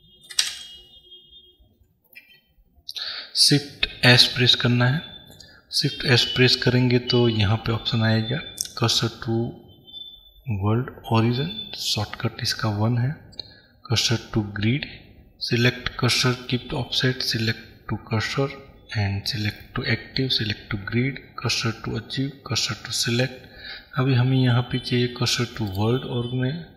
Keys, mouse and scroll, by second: 0.7 Escape.